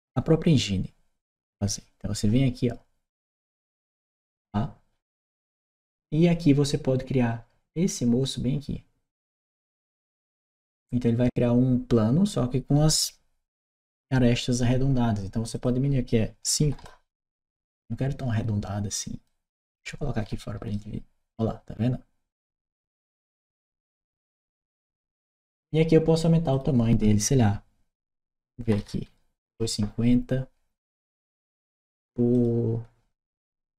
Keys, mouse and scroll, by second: 3.9 click, 9.7 click, 15.3 click, 19.0 Return, 19.0-20.5 right drag, 20.1 d, 22.3-24.1 right drag, 23.5 w, 26.3 click, 27.8-29.1 typing, 29.3 Return, 32.1 click, 33.2-33.7 typing.